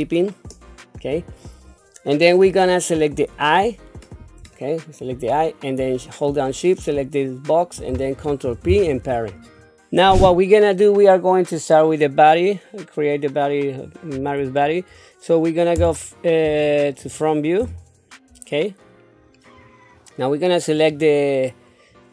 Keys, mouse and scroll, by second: 1.6 scroll up 2, 3.3 click, 4.5 shift+middle click, 5.2 scroll down 1, 6.8 shift+click, 8.4 ctrl+p, 16.9 click, 17.6 KP_1, 18.8-19.3 scroll down 3, 20.7 click.